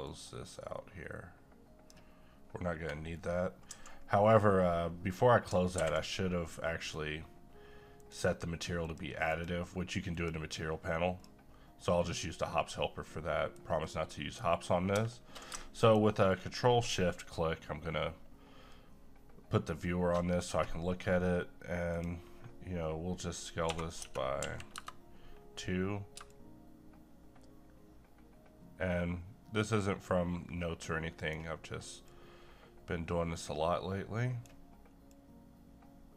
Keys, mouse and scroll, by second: 0.1-3.1 drag, 3.1-3.7 scroll down 1, 5.7 ctrl+`, 6.8 click, 13.3 middle click, 14.1 middle click, 15.8 ctrl+click, 23.6 2, 24.0 Tab, 26.3-36.1 shift+drag.